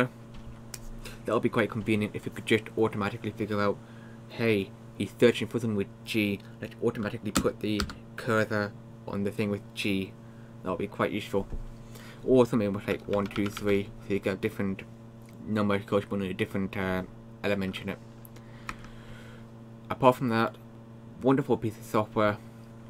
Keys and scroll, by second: 7.8 Down, 12.7-14.1 typing, 18.7 Escape.